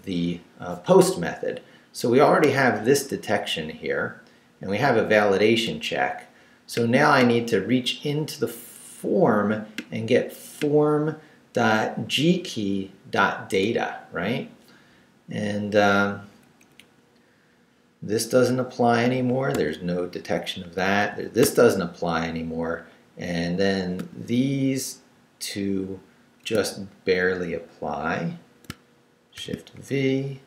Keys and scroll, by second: 16.2 Down, 16.4 Up, 19.2 d, 21.1 d, 25.8 shift+Down, 26.4 shift+Up, 29.3 shift+v, 29.7 shift+Down.